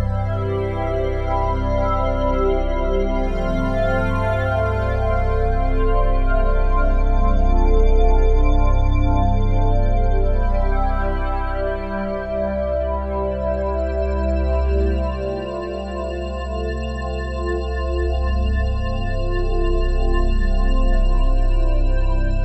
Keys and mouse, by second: 0.0-0.4 typing, 2.4-3.5 drag, 3.6 i, 5.4 click, 5.9-7.0 drag, 6.1-7.0 typing, 8.2 click, 8.9 typing, 9.6 click, 11.0 click, 13.8 click, 15.6 click, 16.4-18.2 typing, 17.2 click, 20.2-21.4 typing.